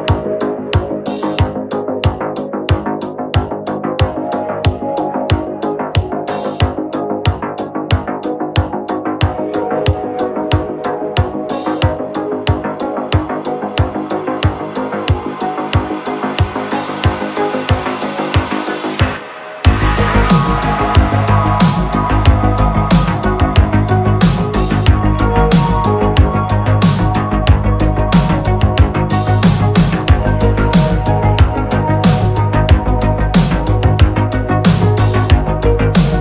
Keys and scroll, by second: 7.6 space, 18.0 ctrl+z, 19.3 ctrl+z, 19.6 ctrl+z, 23.9 space, 28.6 ctrl+z, 31.0 ctrl+z.